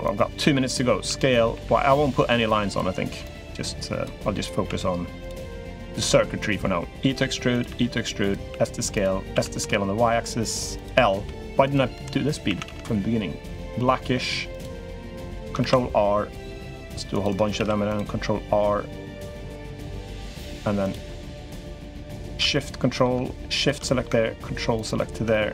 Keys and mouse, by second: 0.8 s, 3.0 click, 4.4 s, 5.4 click, 6.5 e, 7.5 e, 8.3 s, 9.1 s, 10.5 click, 10.9 l, 11.4 click, 11.7 l, 12.2 a, 12.4 g, 15.0 click, 15.4 ctrl+r, 17.3 ctrl+r, 20.1 3, 20.6 click, 21.9 ctrl+shift+click, 22.3 middle click, 23.3 shift+click, 23.6 middle click, 25.1 middle click.